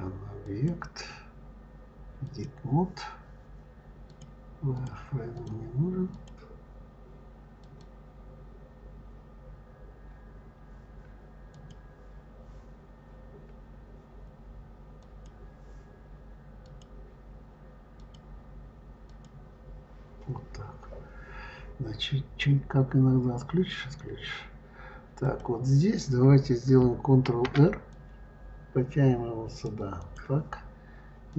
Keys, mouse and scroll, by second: 0.3-3.3 drag, 3.9 click, 4.6 click, 5.2 click, 6.0 click, 7.4 click, 11.3 click, 14.8 click, 16.5 click, 17.8 click, 18.9 click, 25.1 click, 27.1 ctrl+r, 31.1 click.